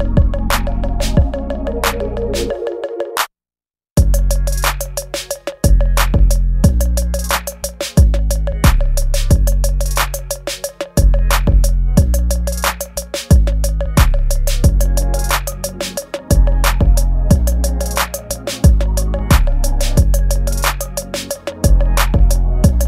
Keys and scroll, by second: 0.1 space, 0.7 space, 1.2 ctrl+z, 2.2 ctrl+z, 3.2 space, 5.7 space, 6.5 ctrl+s, 8.0 space, 11.5 ctrl+s, 12.7 space, 13.5 ctrl+z, 13.9 space, 14.1 space, 18.8 ctrl+z, 19.1-22.8 typing, 20.8 ctrl+z, 21.6 ctrl+z, 22.4 ctrl+z, 22.7 ctrl+z.